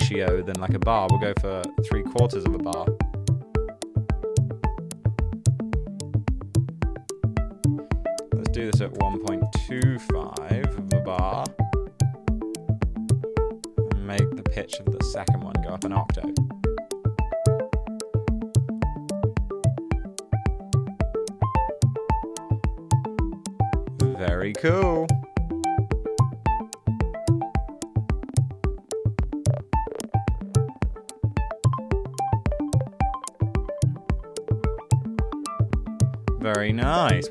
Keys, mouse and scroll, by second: 0.0-0.8 typing, 2.2 Return, 8.5-11.8 typing, 15.4-16.3 typing.